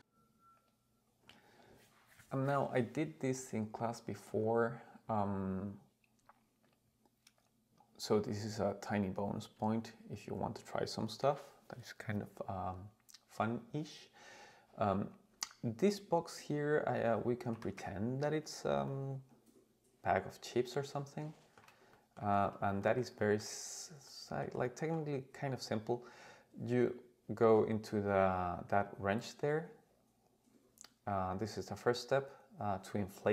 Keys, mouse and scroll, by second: 3.8-4.2 scroll down 3, 4.4 click, 4.9-5.5 scroll down 2, 6.6 click, 7.4 click, 9.7-10.1 scroll down 1, 10.1 click, 14.7 scroll up 2, 16.9-17.5 scroll down 2, 17.5 g, 17.8 z, 18.5 click, 18.9-21.7 middle drag, 21.9-22.3 shift+middle drag, 22.8 shift+middle drag, 23.2 shift+middle drag, 24.1-25.0 shift+middle drag, 26.9 click.